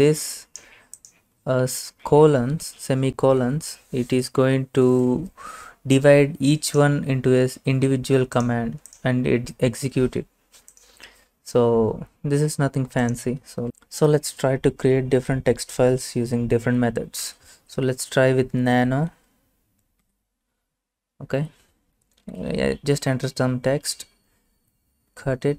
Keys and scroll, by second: 17.0-19.0 typing, 20.1 Return, 22.0-23.0 typing, 24.6 ctrl+x, 25.2 y.